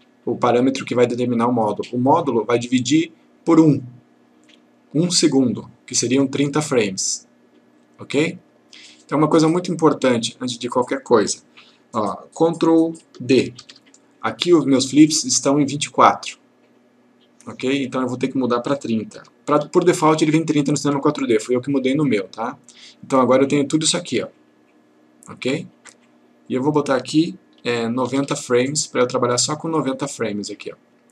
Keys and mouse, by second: 13.6 ctrl+d, 18.0 click, 19.2 typing, 20.9 typing, 22.1 click, 26.5 click, 28.1 typing, 28.6 click.